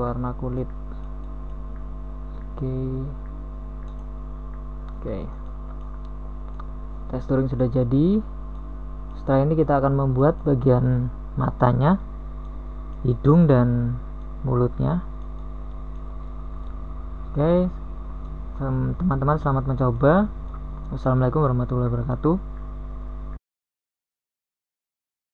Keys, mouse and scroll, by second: 11.8 a, 13.2 g, 18.6-20.0 middle drag, 21.1 g, 24.2 KP_1, 24.8 Tab.